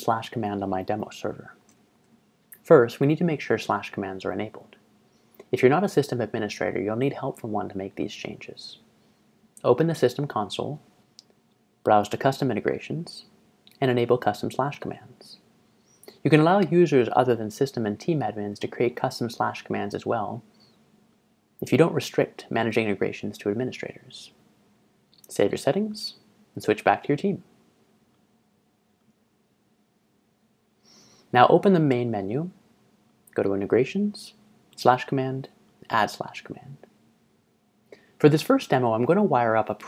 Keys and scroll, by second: 1.3 ctrl+Tab, 1.7 ctrl+Tab.